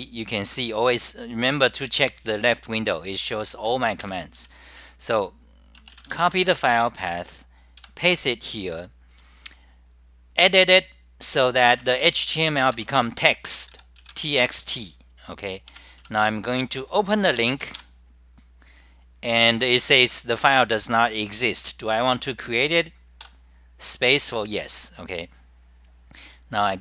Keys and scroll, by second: 0.0-0.1 typing, 2.4-3.2 typing, 5.6-6.4 typing, 7.9 k, 11.6-14.3 typing, 12.7 ctrl+g, 15.6-16.8 typing, 18.7-19.4 typing, 21.9-24.2 typing.